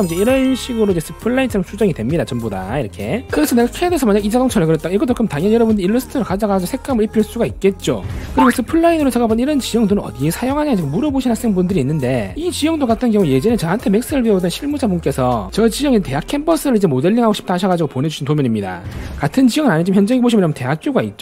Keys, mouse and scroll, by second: 0.4 click, 1.2 click, 2.6 scroll down 1, 2.9 scroll up 2, 3.8 z, 3.9 right click, 4.2 e, 4.4 right click, 5.3 scroll down 1, 5.6 middle click, 20.6 scroll up 2, 21.1 scroll up 2.